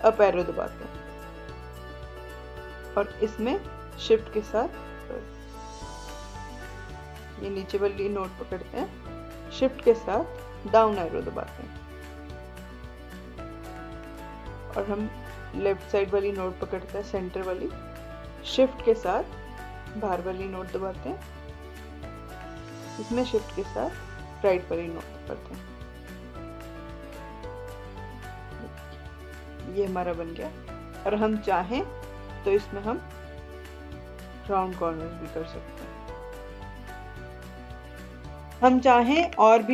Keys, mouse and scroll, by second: 3.9-10.5 drag, 10.5 shift+Down, 14.7-20.0 drag, 20.0 shift+Left, 21.6-24.3 drag, 24.3 shift+Right, 27.7-37.5 drag.